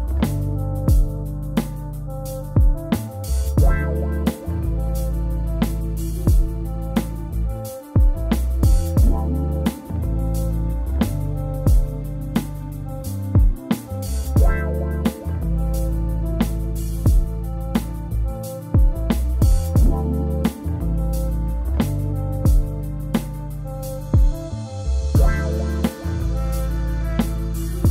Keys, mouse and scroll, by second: 0.5-2.4 scroll up 5, 2.4-3.2 scroll up 1, 3.2 k, 13.0 k, 14.4 k, 19.5 k, 26.3 k.